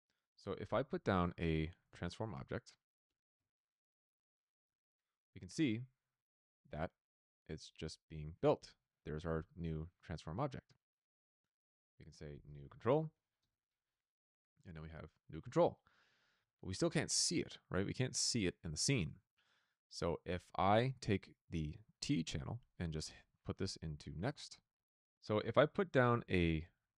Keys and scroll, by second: 0.3-4.5 typing, 12.0-13.4 typing, 25.1-26.9 typing.